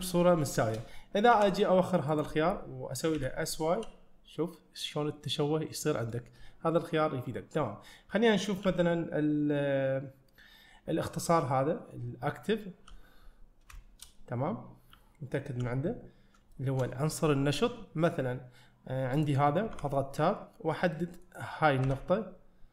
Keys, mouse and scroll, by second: 0.5 shift+middle click, 1.4 ., 13.8-15.0 shift+middle drag, 15.0 ., 16.6 shift+middle click, 19.2 click, 19.8 Tab, 20.4 scroll up 1, 21.0 middle click.